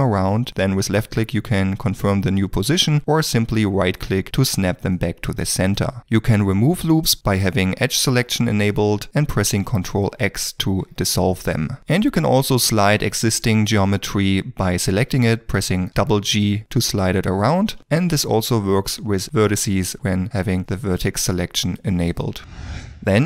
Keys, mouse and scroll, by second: 3.7 right click, 9.9 ctrl+x, 15.9 g, 17.8 2, 18.0 1, 19.2 g.